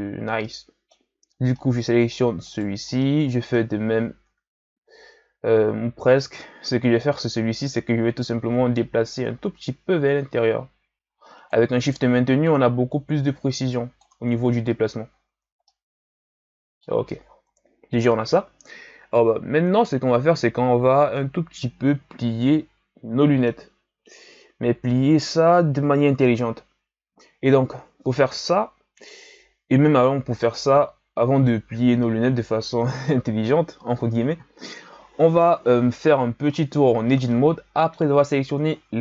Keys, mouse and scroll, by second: 0.5-1.3 middle drag, 1.3 scroll down 2, 1.5-2.5 middle drag, 2.5 right click, 3.0-3.9 middle drag, 3.9 scroll up 1, 4.2 Tab, 8.0 a, 9.2-12.2 drag, 12.5-14.3 drag, 14.3 Tab, 15.1-15.7 scroll down 1, 15.7-17.5 middle drag, 17.5 KP_1, 21.1-24.2 middle drag, 37.3-38.7 middle drag, 38.7-39.0 ctrl+scroll down 2.